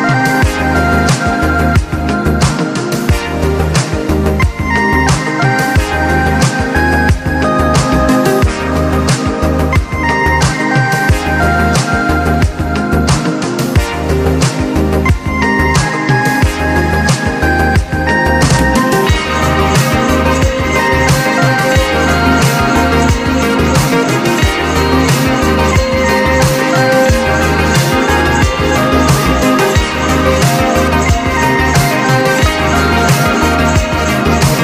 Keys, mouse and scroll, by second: 0.0 click, 1.7-2.5 typing, 2.7 click, 4.6 click, 5.4 2, 6.3 click, 9.4 click, 10.1 4, 10.8 click, 10.9 click, 13.2 click, 15.5 click, 18.4 click, 20.9 click, 21.7-24.2 drag, 24.2-25.7 drag, 27.8-28.9 drag, 30.7 click, 32.6 click.